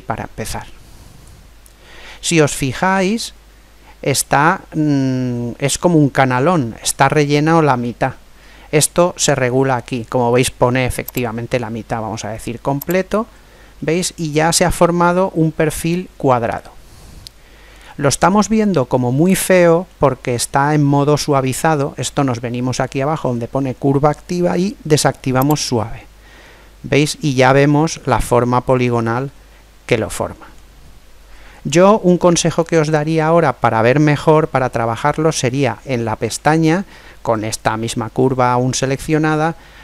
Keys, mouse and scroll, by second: 2.5-4.4 middle drag, 11.2 click, 13.8-15.6 middle drag, 18.4-20.1 middle drag, 20.6-23.6 middle drag, 22.3 scroll up 1, 22.4-23.6 scroll down 1, 23.6-24.5 scroll down 1, 24.5-25.4 scroll down 1, 25.4 click, 26.4-30.1 middle drag, 33.6-37.3 middle drag.